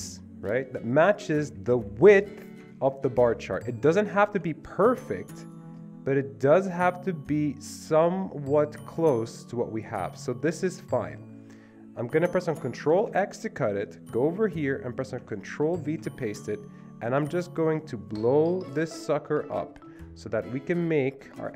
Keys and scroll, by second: 12.9 ctrl+x, 15.7 ctrl+v.